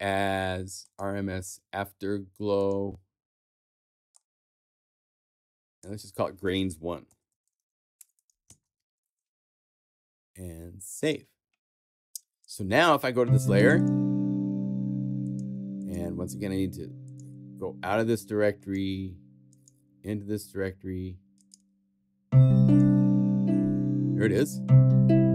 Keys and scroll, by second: 6.8-9.0 typing.